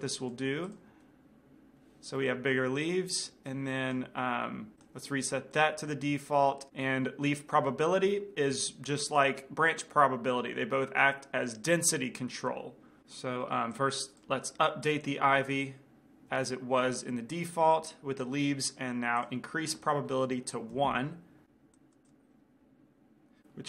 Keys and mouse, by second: 0.0-2.7 drag, 2.3-4.2 middle drag, 3.6-4.7 drag, 4.9-6.7 right drag, 13.9-16.9 drag, 16.9 middle click, 17.8-21.0 drag, 21.8-23.1 drag.